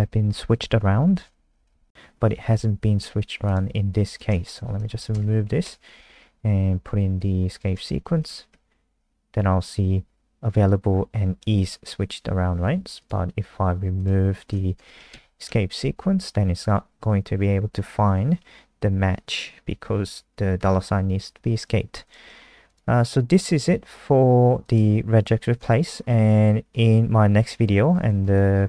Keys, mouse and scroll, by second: 0.1 click, 2.2 Escape, 3.4 click, 4.6 shift+Home, 4.9 shift+Up, 5.6 BackSpace, 7.5 click, 8.1 \, 8.2 ctrl+s, 8.5 F5, 13.0 click, 14.7 BackSpace, 15.1 ctrl+s, 15.4 F5, 21.5 click, 22.2 scroll down 3, 23.4-24.6 scroll up 4, 24.6 click, 25.5-26.7 scroll down 12, 26.8-27.2 scroll down 2, 27.5-28.6 scroll down 21.